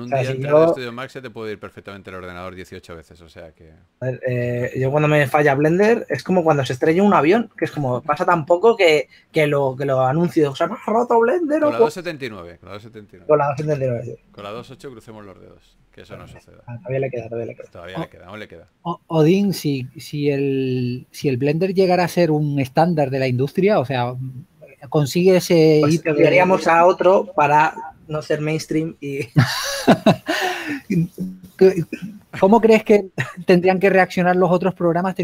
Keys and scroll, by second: 2.3 shift+f, 3.5-4.7 typing, 15.8-16.9 typing, 18.3 s, 20.4 2, 23.7 s, 32.0 4.